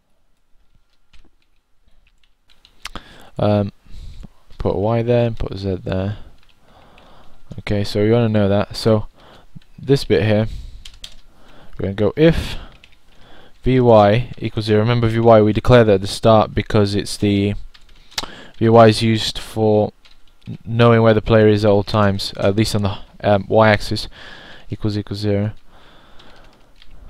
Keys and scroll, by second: 1.8-3.3 typing, 4.3 0, 7.4 typing, 11.8-12.6 typing, 15.0-16.6 typing.